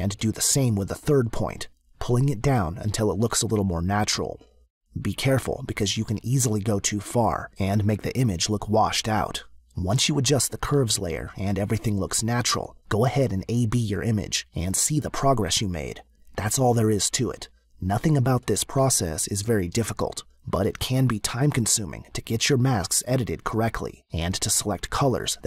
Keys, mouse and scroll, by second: 1.4 click, 11.1 click, 21.7 click, 23.8 click.